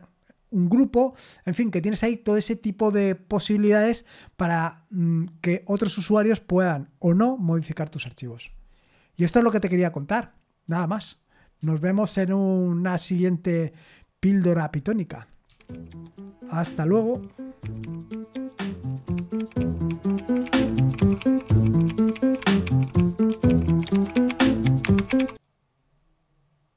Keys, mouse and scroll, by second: 15.4 super+x, 26.7 click.